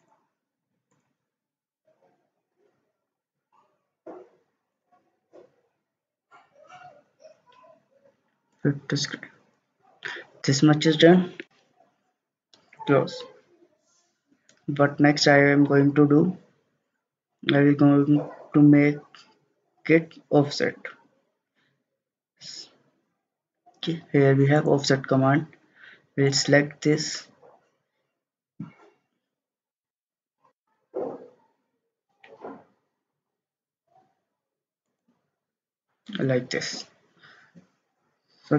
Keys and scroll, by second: 29.6-30.5 typing, 30.6 Return.